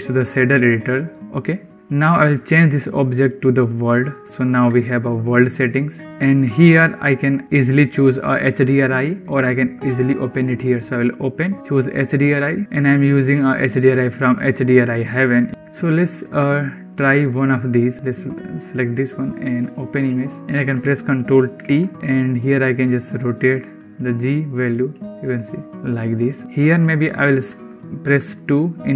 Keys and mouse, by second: 0.6 middle click, 2.4-3.6 drag, 4.1 click, 5.0 click, 10.9 click, 21.3 ctrl+t, 21.7 click, 22.9-25.7 drag, 26.1 click, 26.8-28.2 drag.